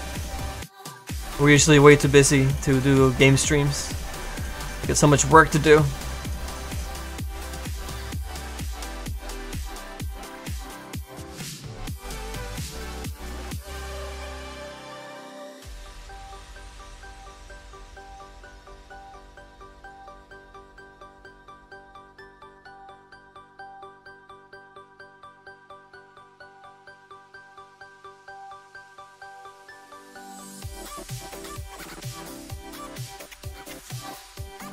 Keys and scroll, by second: 11.4 s, 14.2 s, 31.6 s.